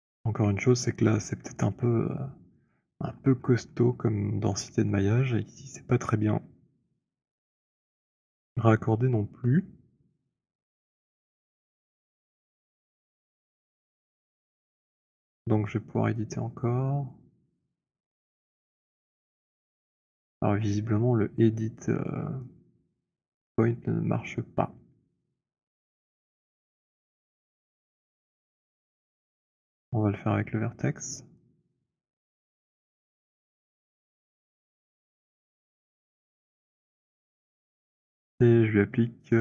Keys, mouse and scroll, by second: 2.8 alt+click, 3.1-3.7 alt+scroll, 4.8-6.2 alt+scroll, 9.6 alt+middle click, 9.6 click, 13.4 right click, 14.9 click, 17.6 click, 18.6-20.0 j, 20.0 click, 20.3 j, 23.6 right click, 26.9 right click, 29.5 right click, 31.8 click, 34.6 click, 36.3 alt+click, 39.3 click.